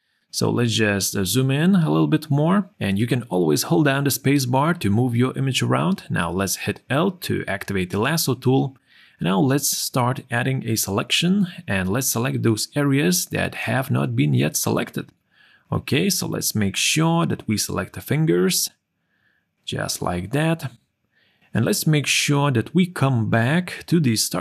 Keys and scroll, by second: 2.0 space.